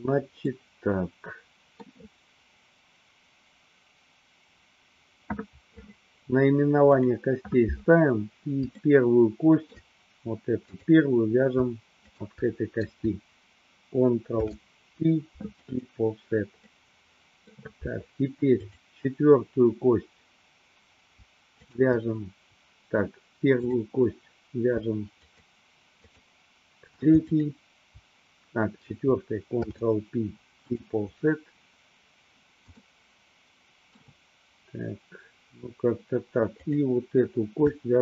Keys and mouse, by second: 0.6-2.1 middle drag, 6.9 click, 9.1 shift+middle click, 10.9 click, 12.3 shift+click, 14.3 ctrl+p, 16.8 middle click, 18.8 click, 21.6 shift+click, 23.6 click, 25.2 shift+click, 26.2 shift+click, 27.4 shift+click, 29.5 ctrl+p, 33.1-34.3 shift+middle drag, 36.6 click.